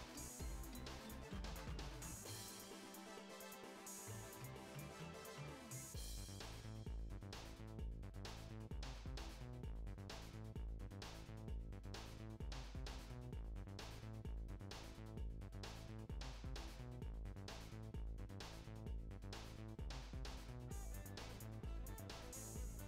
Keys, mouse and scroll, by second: 0.2 click, 0.7 ctrl+shift+b, 2.3 scroll down 4, 2.5 shift+middle click, 3.0 scroll down 1, 3.2 shift+middle click, 3.7-4.5 scroll up 3, 4.0 shift+middle click, 4.5 click, 5.0 ctrl+shift+b, 5.9 scroll down 4, 6.1 shift+middle click, 6.3 click, 6.5-7.0 scroll up 5, 7.0 ctrl+shift+b, 7.9 scroll down 2, 8.1 shift+middle click, 8.4 click, 8.9 ctrl+shift+b, 10.2 click, 10.7 ctrl+shift+b, 11.5 click, 11.9 ctrl+shift+b, 14.8 shift+middle click, 15.2 a, 15.6 click, 15.9 alt+z, 16.1 alt+z, 16.3 click, 16.8 m, 17.3 click, 18.0 click, 18.5 m, 19.0 click, 19.5 m, 20.0 shift+middle click, 20.4 click, 20.9 ctrl+shift+b, 22.2 shift+middle click, 22.6 click.